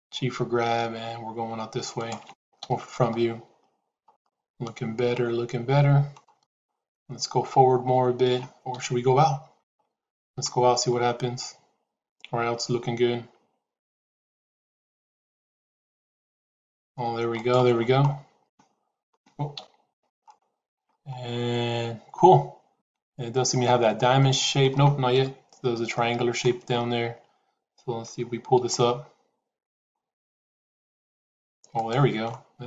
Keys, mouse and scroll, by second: 0.1 g, 2.5 KP_1, 4.0-6.1 middle drag, 8.6 KP_1, 10.1 g, 18.3 shift+middle click, 19.5 KP_1, 20.3 shift+middle click, 22.7 shift+middle click, 24.1 shift+middle click, 25.0 KP_1, 25.8 shift+middle click, 28.0 g.